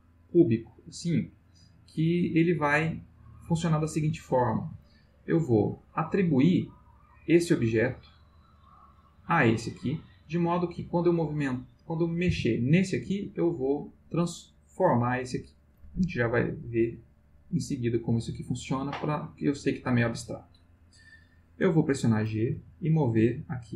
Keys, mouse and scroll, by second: 0.1-4.0 middle drag, 4.2-5.0 ctrl+middle drag, 7.2 click, 9.1 click, 10.9 click, 12.2 g, 13.0 Escape, 16.9 click, 22.5 g.